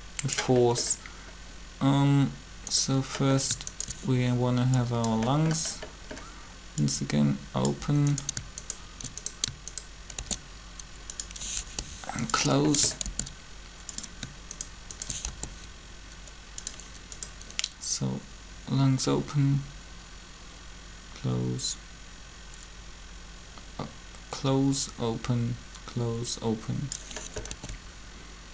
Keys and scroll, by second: 10.2 shift+d, 11.6 g, 13.0 shift+d, 15.3 shift+g, 27.5 alt+a.